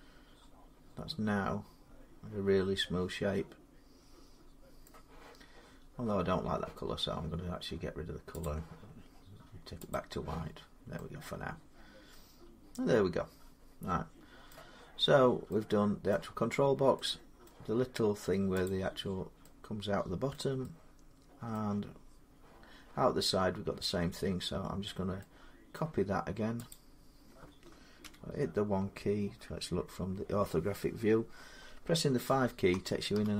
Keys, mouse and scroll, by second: 0.1-1.7 drag, 4.6 middle click, 8.2 click, 9.7 click, 10.5 scroll down 3, 14.3 middle click, 14.9 middle click, 14.9 scroll down 2, 15.9 middle click, 17.3 middle click, 17.4 middle click, 18.5 click, 20.1 middle click, 21.3 middle click, 25.5 middle click, 26.5 click, 27.8 1, 32.1-33.3 typing.